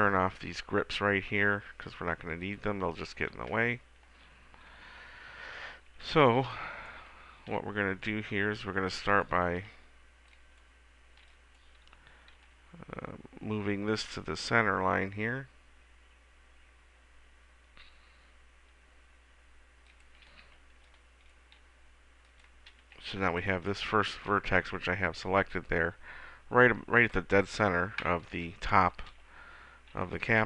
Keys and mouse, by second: 2.7-4.5 drag, 6.2 a, 6.6 b, 7.6 g, 8.9 middle click, 9.8 g, 11.4 b, 12.6 g, 20.2-22.2 drag, 20.6 a, 20.9 b, 21.8 g, 22.6-24.2 drag, 22.9 a, 23.4 b, 29.4 a, 30.1 b.